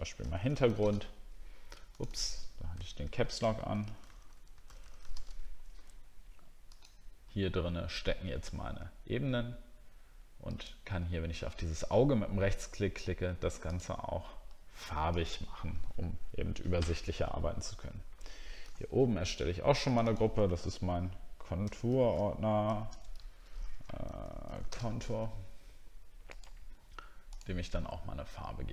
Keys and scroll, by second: 3.4 shift+h, 18.6 ctrl+h, 21.6 shift+c.